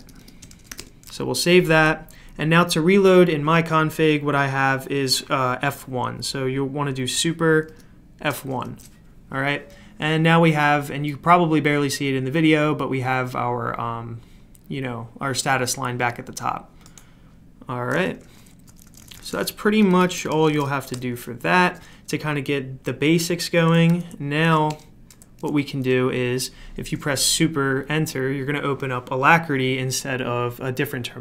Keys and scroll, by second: 0.1 Escape, 0.2 Escape, 0.2-1.2 typing, 7.7 super+F1, 18.6-21.0 typing, 19.8 Escape, 20.0 Escape, 23.9 super+q, 24.7 super+Return.